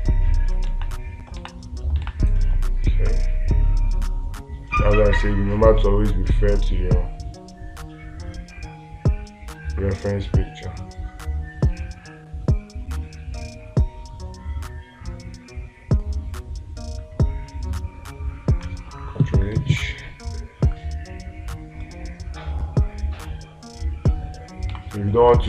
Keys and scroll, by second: 2.5 space, 25.2 space.